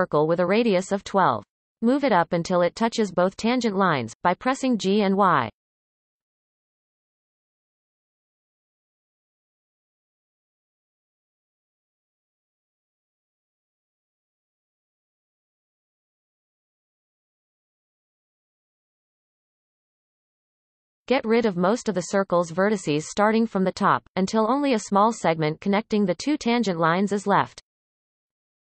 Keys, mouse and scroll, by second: 0.0 alt+a, 2.5-4.9 drag, 4.9 g, 6.9-7.5 scroll up 4, 7.5-7.8 shift+middle drag, 7.8-8.5 scroll up 5, 8.5-8.9 shift+middle drag, 9.1-9.6 scroll up 2, 9.9-11.0 shift+middle drag, 11.0 g, 13.0-13.6 scroll up 5, 13.6 shift+middle click, 14.3-15.1 scroll up 3, 15.1 shift+middle click, 15.9 g, 19.5-20.6 scroll down 13, 21.0-21.7 scroll down 5, 21.7-24.5 shift+middle drag, 24.5 click, 25.5-28.6 ctrl+KP_Add.